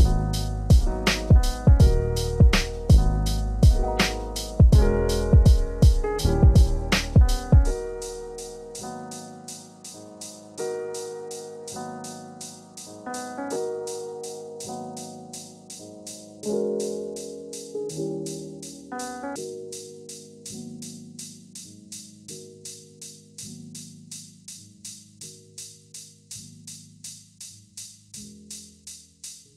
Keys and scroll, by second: 3.3 ctrl+z, 7.8 ctrl+space, 14.4 ctrl+z, 19.9 ctrl+z, 22.6 ctrl+space, 24.1 ctrl+z.